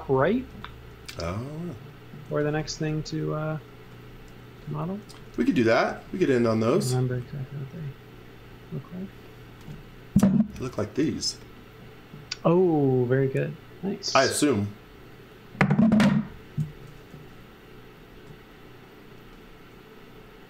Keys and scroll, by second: 0.2 x, 0.5 v, 0.9 space, 2.0-3.3 typing, 4.8-5.9 typing, 7.6 b, 18.1 space.